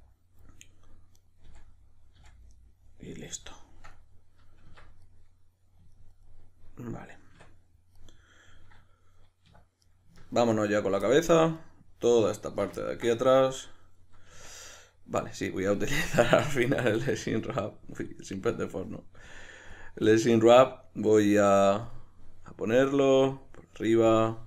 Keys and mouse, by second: 1.1 right click, 1.3-11.6 middle drag, 1.4 f, 4.7 Tab, 7.3 Tab, 9.5 \, 11.6 right click, 12.5 ctrl+right click, 12.8-16.0 ctrl+middle drag, 14.4 Tab, 16.0-24.4 drag.